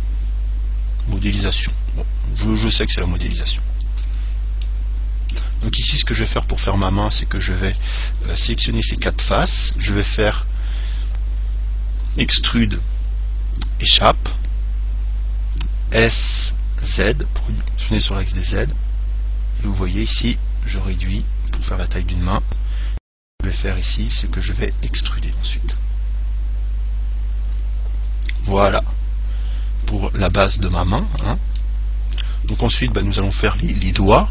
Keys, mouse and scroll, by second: 0.0 click, 2.0-4.7 middle drag, 4.3 Tab, 4.9-6.7 middle drag, 6.3 ctrl+Tab, 7.9-11.3 right drag, 12.4 e, 16.4 s, 21.8 click, 22.7-24.7 middle drag, 25.1 e, 28.9 click, 30.5-33.8 middle drag.